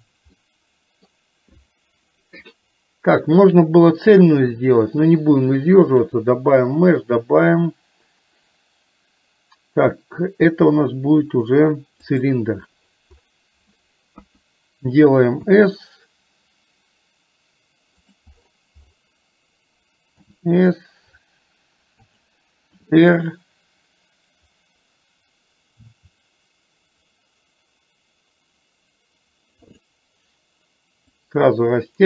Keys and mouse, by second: 0.4 middle click, 6.0-12.4 drag, 14.2 KP_1, 15.6 s, 31.4-32.0 drag.